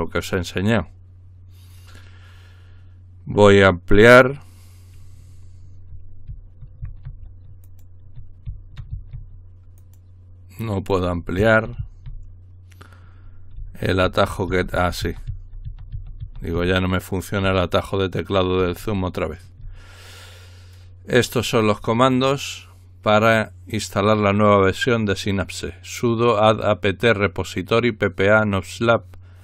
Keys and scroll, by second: 6.3-6.8 typing, 8.5-8.9 typing, 11.4-11.8 typing, 14.0-14.7 typing.